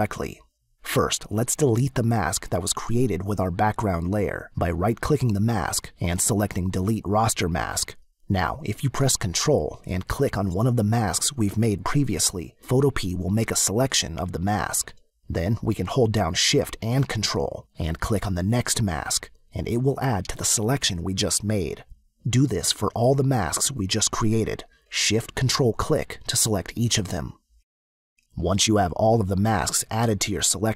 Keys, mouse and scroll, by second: 3.7 click, 4.2 right click, 6.2 click, 12.2 ctrl+click, 18.9 ctrl+shift+click, 22.5 ctrl+shift+click, 25.2 ctrl+shift+click, 27.6 ctrl+shift+click.